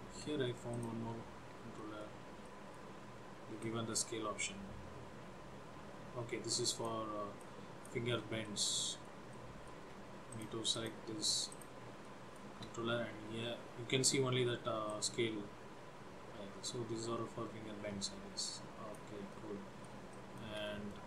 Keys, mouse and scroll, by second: 0.8 click, 1.9 shift+middle click, 2.5 middle click, 3.7 click, 7.5 shift+click, 8.5 middle click, 9.4 shift+middle click, 10.4 click, 10.9 click, 11.8 click, 12.2 shift+middle click, 13.4-14.5 scroll up 1, 14.5 scroll up 1, 15.0 click, 19.4 middle click, 20.3 shift+middle click, 20.8 middle click.